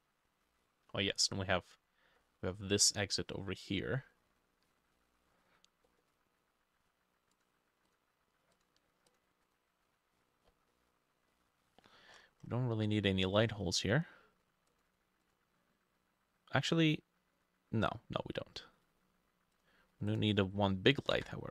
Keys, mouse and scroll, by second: 0.5 middle click, 0.6-1.3 scroll down 11, 1.3 middle click, 2.2 middle click, 2.8 middle click, 3.8 middle click, 4.3-5.0 scroll up 3, 5.0 middle click, 5.4-5.9 scroll up 3, 5.9 middle click, 9.5 double click, 10.3-10.7 scroll down 7, 10.7 middle click, 11.3 middle click, 12.1-12.8 scroll up 11, 12.8 middle click, 21.2 ctrl+d.